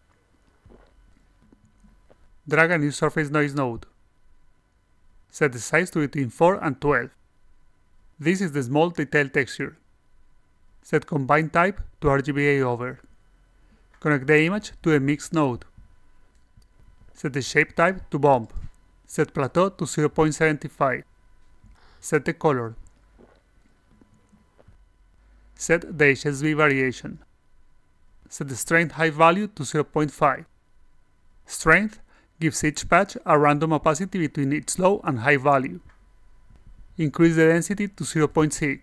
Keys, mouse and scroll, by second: 0.5 click, 3.4-4.2 drag, 5.4 click, 11.4 click, 13.7 click, 14.8 click, 16.2 click, 16.8 click, 16.8 a, 17.3 drag, 17.9 click, 19.1 click, 19.5 click, 22.9 click, 26.1 click, 28.3 click, 37.7 click.